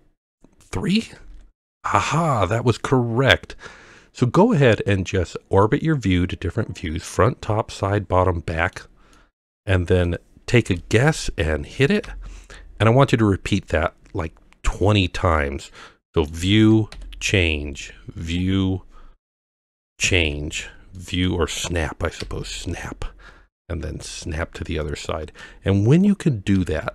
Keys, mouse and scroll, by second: 1.2 ctrl+KP_3, 4.4-5.1 middle drag, 5.6-8.8 middle drag, 9.1 middle click, 12.0 ctrl+KP_1, 15.4-16.3 middle drag, 16.9 KP_3, 17.8 middle click, 19.3-19.6 middle drag, 20.0 ctrl+KP_3, 21.0-21.3 middle drag, 22.2 KP_1, 24.8-25.4 middle drag, 26.6 KP_7.